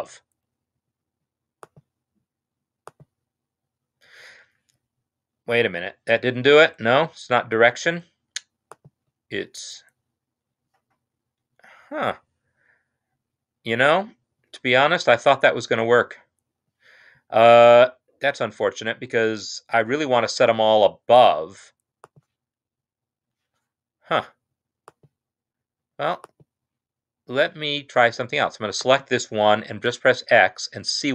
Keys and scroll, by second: 30.4 x.